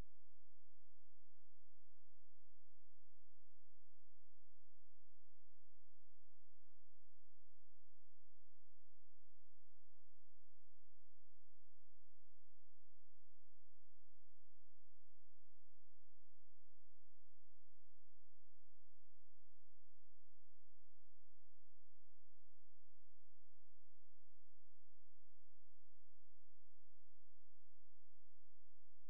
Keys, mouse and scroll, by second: 4.1-8.8 drag, 16.6 click, 24.4 alt+shift+click, 28.9 click.